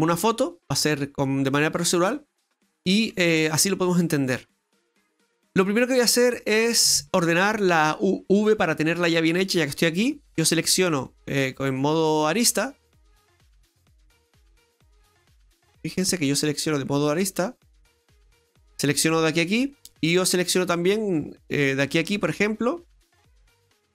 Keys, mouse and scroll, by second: 3.0 scroll up 1, 4.8 middle click, 7.1-7.5 scroll up 2, 7.5 middle click, 8.1-8.7 scroll up 2, 8.7 middle click, 10.3 right click, 13.9-14.2 scroll down 1, 14.2-15.5 scroll up 2, 16.0 click, 17.2 right click, 17.9 shift+right click, 18.4 shift+right click, 18.9 middle click, 19.7 middle click, 21.3 middle click, 21.6 right click, 22.9 ctrl+shift+right click, 23.6 middle click.